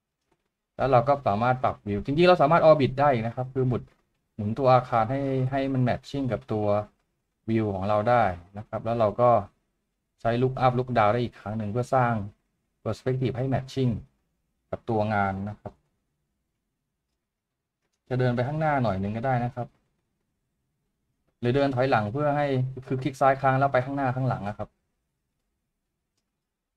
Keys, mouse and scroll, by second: 17.7 click.